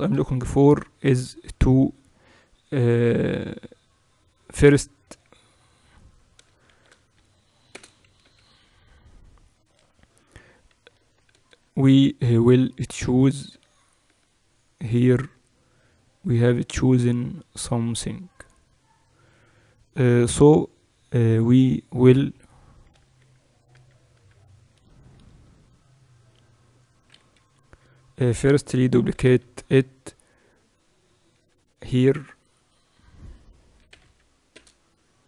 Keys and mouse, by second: 5.2 KP_7, 6.6 shift+d, 8.2 m, 10.4-11.7 right drag, 10.8 Tab, 11.2 z, 11.7-13.0 middle drag, 13.0 a, 13.4 a, 22.9-25.1 typing, 26.2 Tab, 27.3 KP_1, 28.9 shift+d.